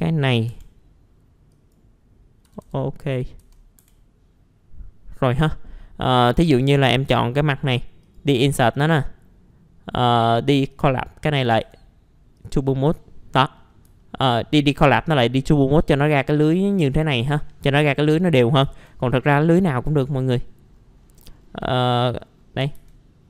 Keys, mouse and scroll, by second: 0.2 scroll up 1, 0.5 F3, 1.5 click, 2.4-3.4 typing, 3.8 F3, 4.6 scroll down 1, 5.3 middle click, 6.4 4, 6.6 click, 7.0 right click, 8.0 click, 8.7 right click, 10.7 click, 11.6 click, 12.3-13.4 drag, 13.6 middle click, 13.7 scroll down 1, 14.0 alt+middle click, 16.6 scroll down 1, 17.7-18.6 scroll up 1, 20.0 middle click, 20.1-21.0 scroll down 1, 21.0 middle click, 21.4-22.0 scroll down 1, 22.0 scroll up 1, 22.7 ctrl+z.